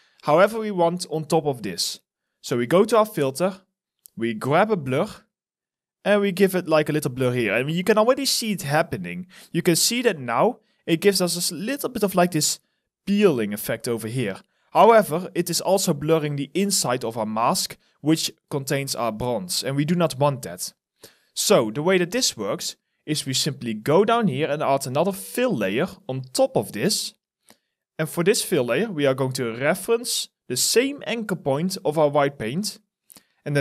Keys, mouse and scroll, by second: 8.6 alt+middle click, 9.0 alt+right click, 9.4 alt+click, 17.0 alt+right click, 17.8 alt+middle click, 18.2 alt+click, 18.7 alt+middle click, 19.2 alt+right click, 19.9 alt+middle click, 20.4 alt+right click, 20.8 alt+click.